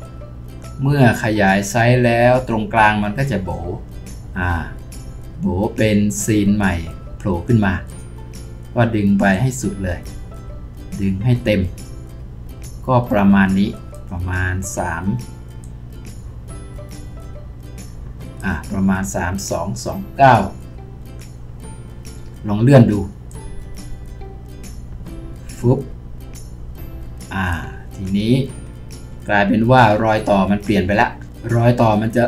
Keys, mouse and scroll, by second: 28.4-30.7 scroll down 1, 32.1-32.2 scroll up 1.